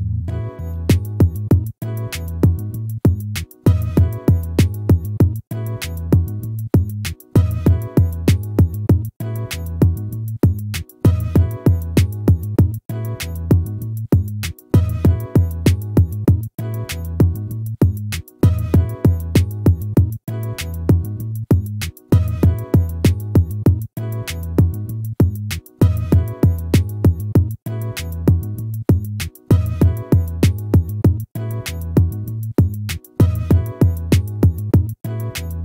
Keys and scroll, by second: 2.1 ctrl++, 3.8 ctrl++, 5.6 ctrl+-, 22.4 ctrl++, 25.8 ctrl++, 31.2 ctrl++.